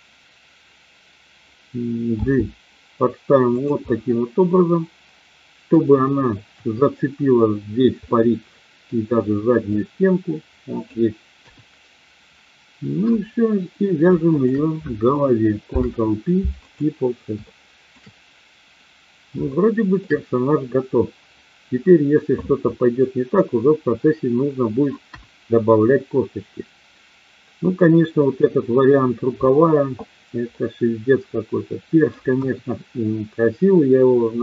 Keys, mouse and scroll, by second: 2.1 g, 3.5 click, 3.8-5.9 middle drag, 6.5 KP_1, 8.0 middle click, 9.8-10.8 drag, 11.4 KP_1, 14.3 shift+click, 15.6 ctrl+p, 17.4 shift+middle click, 19.5 shift+middle click, 25.0 KP_1, 30.5-32.0 middle drag, 32.3 KP_1.